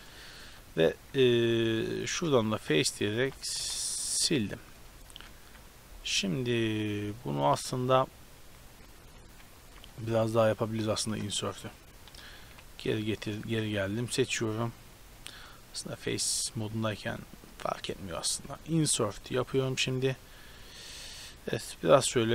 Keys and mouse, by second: 2.1 middle click, 2.4 b, 3.1 b, 3.6 x, 4.0 middle click, 5.1 a, 5.3 KP_7, 8.7 ctrl+z, 9.1 ctrl+z, 9.3 ctrl+z, 10.3 ctrl+z, 10.6 ctrl+z, 12.3 ctrl+z, 12.5 ctrl+z, 13.3-15.1 right drag, 14.1 a, 15.7-17.1 right drag, 16.0-17.1 drag, 17.5-18.8 drag, 17.5 o, 19.4 i, 21.8 click.